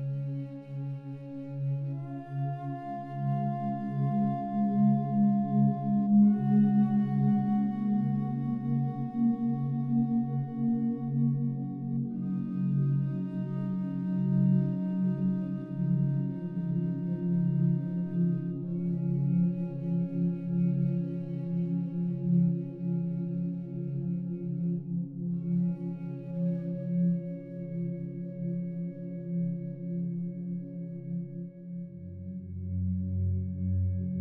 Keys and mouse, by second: 0.6 ctrl+alt+click, 1.6 alt+click, 2.4 alt+click, 3.2 alt+click, 4.0 ctrl+alt+click, 4.4 alt+shift+click, 5.1 alt+click, 6.2 alt+click, 7.3 ctrl+alt+click, 8.9 alt+click, 9.7 alt+click, 10.9 alt+click, 11.5 ctrl+alt+click, 12.1 alt+shift+click, 12.6-15.2 alt+shift+drag, 15.5 ctrl+alt+click, 15.9 alt+click, 17.0 click, 18.5-20.3 drag, 20.7 alt+click, 21.8 alt+click, 23.1 alt+click, 23.8 alt+click, 24.2 alt+shift+click, 24.7 alt+click, 25.6 ctrl+alt+click, 26.2 alt+shift+click, 26.6-28.0 alt+drag, 28.7 ctrl+alt+click, 29.0 alt+click, 30.1 7, 31.8-33.0 drag.